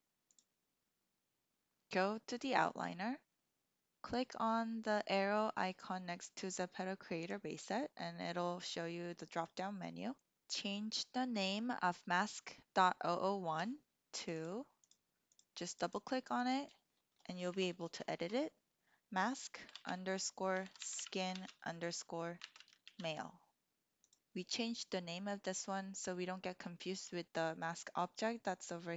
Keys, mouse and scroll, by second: 7.1 click, 14.4-15.4 drag, 15.7 click, 17.6-24.1 drag, 17.6 BackSpace, 18.2 BackSpace.